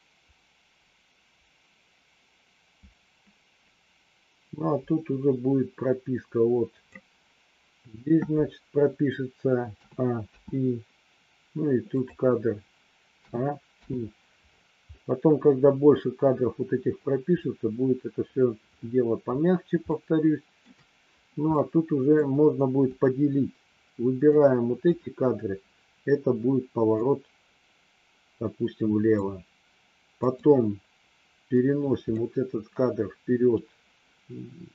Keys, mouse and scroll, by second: 10.3 i, 11.9 click, 13.2 a, 13.8 i, 19.9 shift+middle click, 21.7 middle click, 22.9 click, 24.3 click, 26.9-29.2 drag, 30.2 click, 31.4 click.